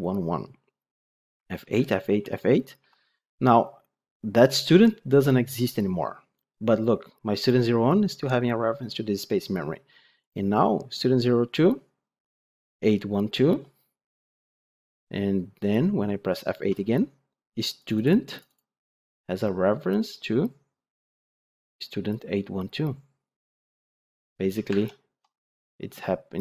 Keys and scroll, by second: 1.3 F8, 13.4 F8, 14.8 F8.